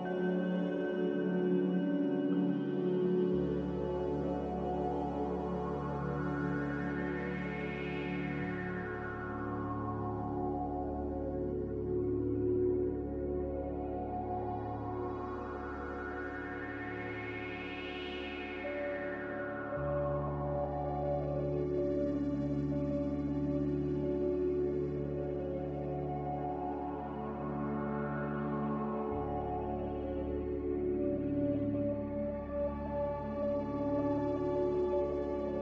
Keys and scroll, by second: 6.0 n, 7.5 q, 18.5 typing, 20.7 q, 23.0 ctrl+c, 26.1 ctrl+v, 27.0 b, 30.1 a.